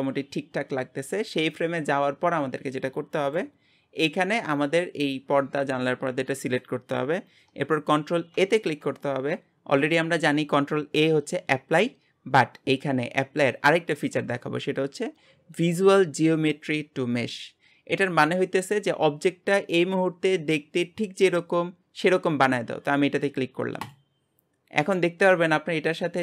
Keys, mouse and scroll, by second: 3.4 click.